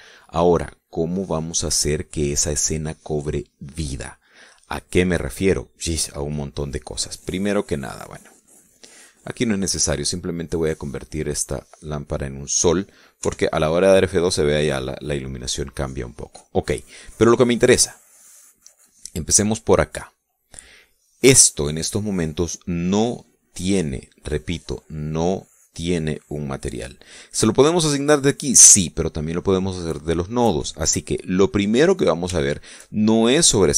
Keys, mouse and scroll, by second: 8.3 right click, 9.0 right click, 10.6 click, 11.6 click, 13.8 F12, 16.0 middle click, 18.5 right click, 33.0 shift+middle click, 33.6 shift+middle click.